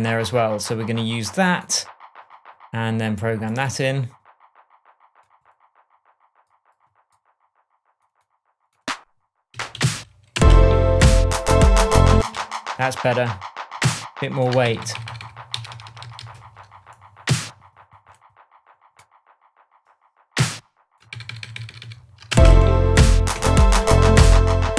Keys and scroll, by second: 9.5 Up, 10.3 space, 12.1 space, 14.6 super+d, 15.5 super+z, 21.1 super+d, 22.3 super+space, 23.2 shift+space, 23.3 shift+Tab.